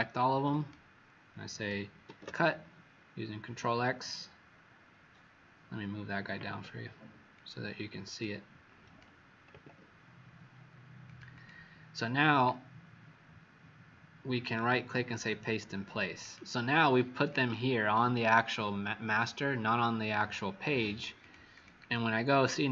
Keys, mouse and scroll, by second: 7.4 click, 9.4 click, 11.3 click, 14.4 right click, 15.1 click, 21.4 click, 22.6 click.